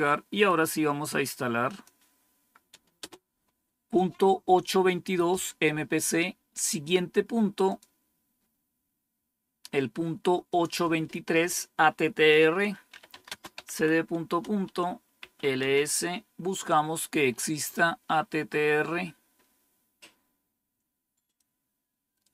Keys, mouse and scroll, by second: 0.4 right click, 1.6 click, 2.9 Return, 7.6 click, 10.4 click, 12.6-15.6 typing, 17.2-17.7 scroll up 2, 18.4 scroll up 1, 19.3 scroll down 1, 21.3-22.3 drag.